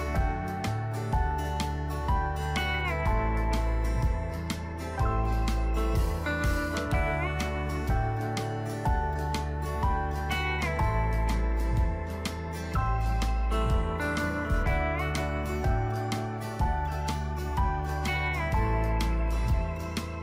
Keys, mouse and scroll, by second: 17.0 ctrl+g, 18.6-20.2 drag.